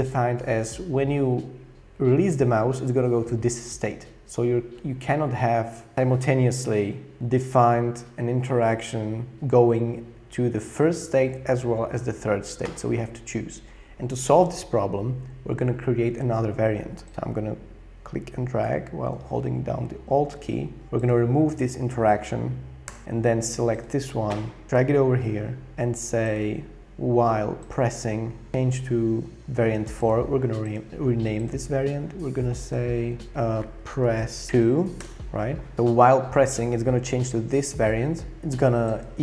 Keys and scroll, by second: 22.9 BackSpace, 33.6-35.0 typing, 35.0 Return.